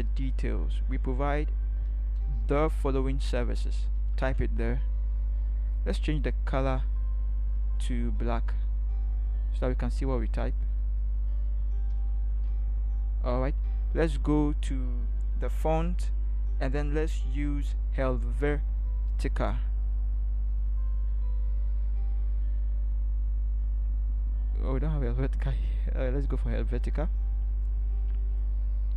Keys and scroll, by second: 2.2 ctrl+c, 4.0 ctrl+v, 11.9 ctrl+v, 14.1 ctrl+v.